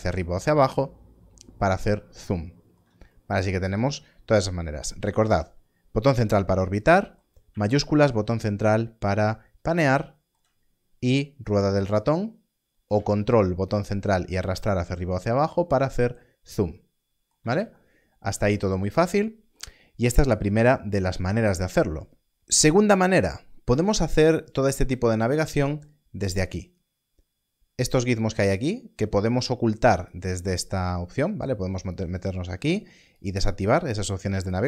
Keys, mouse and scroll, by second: 11.0 scroll down 1, 11.8 scroll up 1, 12.4 scroll down 1, 33.1 click.